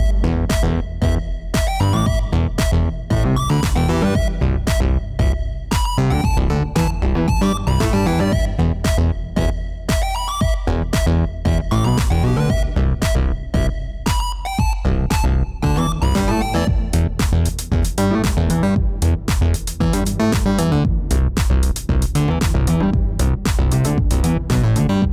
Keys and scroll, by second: 2.8 r, 3.1 y, 9.7 0, 9.9 ., 10.4 1, 11.8 Return, 14.4 2, 14.9 Return, 20.5 r, 20.7 alt+a.